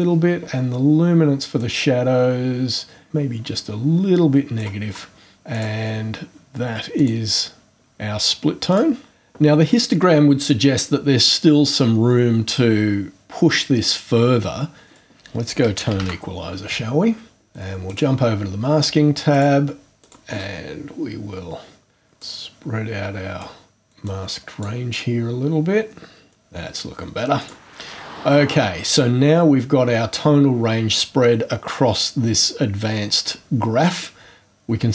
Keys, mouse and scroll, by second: 1.6-4.8 drag, 5.5 click, 6.9 click, 8.7 click, 15.0 click, 15.5-16.5 typing, 17.9 click, 19.3 click, 20.0 click, 22.0 click, 23.4 click, 24.0 click, 27.4 click.